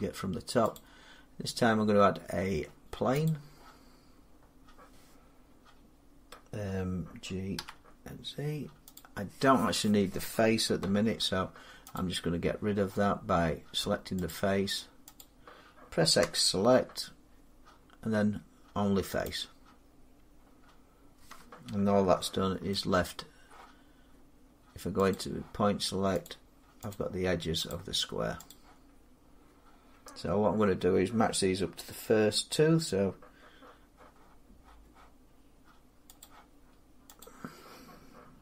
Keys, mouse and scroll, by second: 0.6 click, 3.3 click, 7.4 g, 8.8 click, 10.8 Tab, 11.8 click, 14.1 click, 15.0 click, 16.0 x, 19.1 click, 20.4 middle click, 20.5 middle click, 22.6 shift+middle click, 23.3 shift+middle click, 24.9 click, 26.1 click, 26.8 click, 27.5 click, 28.3 click, 36.0 click, 37.1 click.